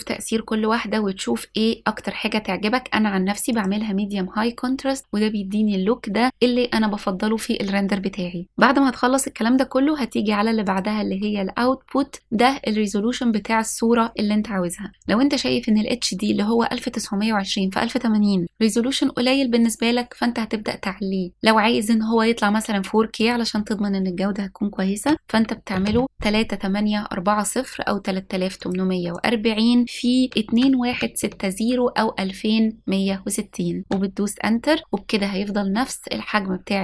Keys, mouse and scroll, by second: 10.6 click, 11.6-14.9 scroll up 2, 23.1-28.7 drag, 29.1-33.9 drag.